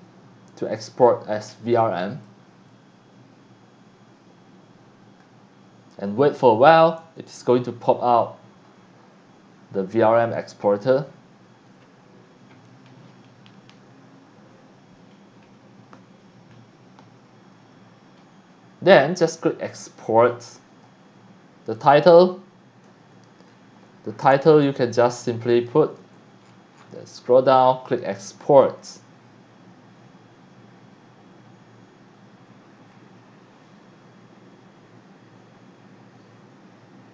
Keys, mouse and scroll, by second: 2.1 click, 7.6-11.1 scroll down 1, 19.3 click, 21.7 click, 22.8 a, 24.2 BackSpace, 25.0 a, 25.6 click, 26.0 a, 26.4-26.9 scroll down 2, 27.8 click, 33.5-33.8 scroll up 2.